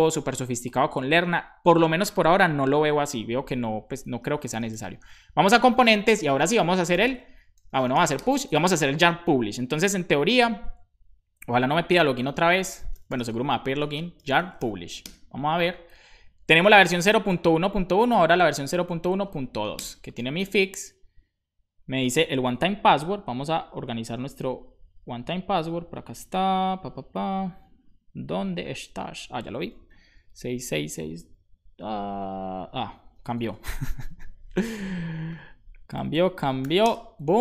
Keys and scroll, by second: 3.6-5.2 typing, 5.3 Return, 6.6-7.8 typing, 12.7-14.2 typing, 17.0-19.5 typing, 19.7 Return, 30.2 6, 32.9 BackSpace, 35.3-36.6 typing, 36.8 Return.